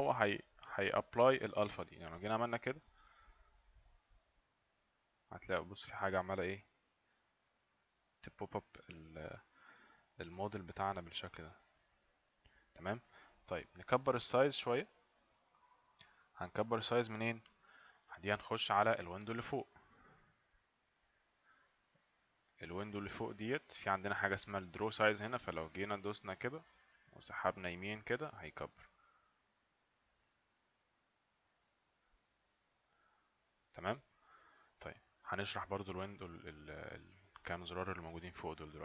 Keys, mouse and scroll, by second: 2.3 click, 25.7 click, 28.7 click.